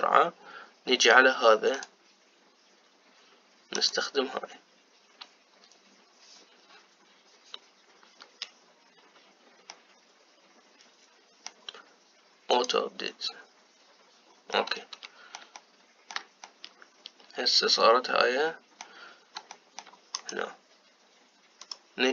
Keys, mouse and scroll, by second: 0.0-2.4 middle drag, 2.4 click, 10.4-14.1 middle drag, 14.1 click, 15.3-20.2 middle drag, 20.3 shift+middle click, 20.8 click.